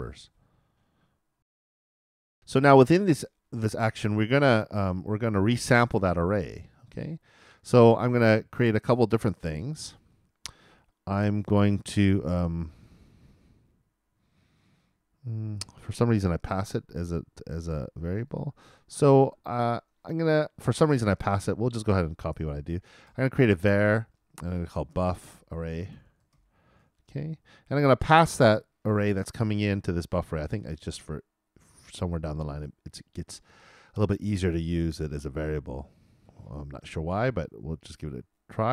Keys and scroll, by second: 1.4 alt+l.